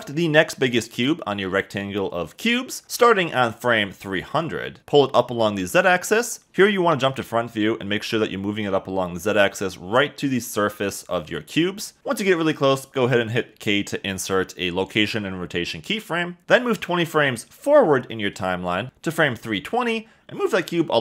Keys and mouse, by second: 5.6 g, 5.8 z, 7.1 Escape, 11.5 KP_0, 13.5 k, 20.8 g, 20.9 z.